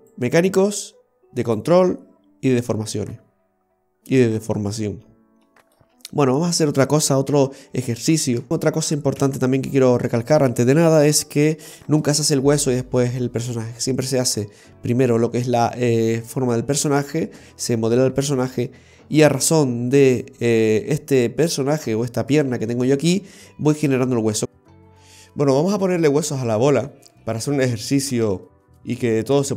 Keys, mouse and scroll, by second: 0.2 right click, 1.6 right click, 2.6 right click, 4.8-5.2 scroll up 1, 5.2 scroll down 2, 5.6 middle click, 7.4 a, 8.5 Delete, 8.5-9.2 scroll down 3, 9.3 KP_3, 10.1-11.1 scroll up 3, 11.2 shift+middle click.